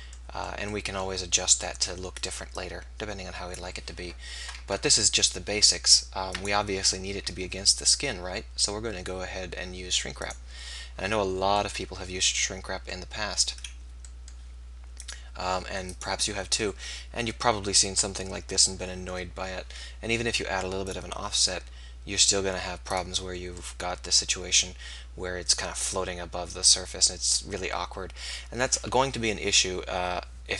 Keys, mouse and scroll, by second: 1.5-4.2 drag, 2.6-4.0 right drag, 4.2 right click, 6.3-10.4 drag, 15.1-22.6 drag, 23.0-24.7 drag.